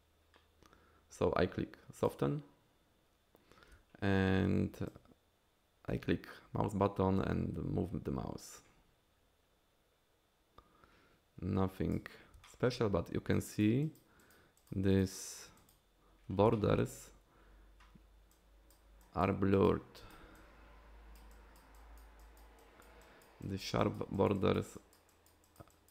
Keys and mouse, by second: 2.0 click, 4.9-11.9 drag, 12.4 shift+click, 13.3 click, 13.8 click, 14.2 click, 14.6 click, 14.9 click, 15.2 click, 15.6 click, 16.5 shift+click, 18.3 click, 19.0 click, 19.5 click, 20.0 click, 20.3 click, 21.3 click, 21.7 click, 22.2 click, 22.6 click, 23.0 click, 23.4 click, 23.8 click, 24.1 click, 24.3 click, 24.7 click, 25.1 click, 25.4 click, 25.7 click.